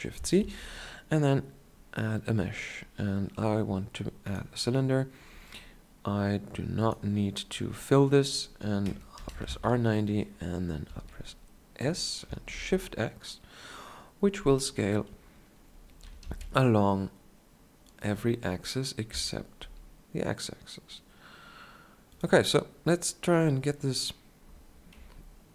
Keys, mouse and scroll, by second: 0.6 shift+a, 9.4 r, 11.1 s, 16.0-18.0 drag, 16.0 s, 19.8 s, 25.1 KP_7.